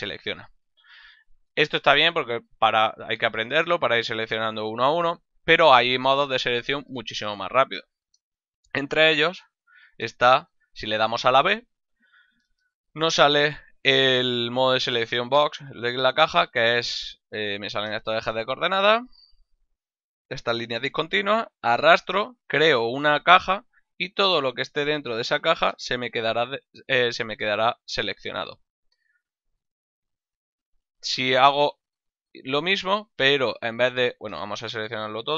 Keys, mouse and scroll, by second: 8.7 a, 10.5 b, 20.1 click, 30.7 a, 31.4 b, 32.7 middle click, 34.4 a.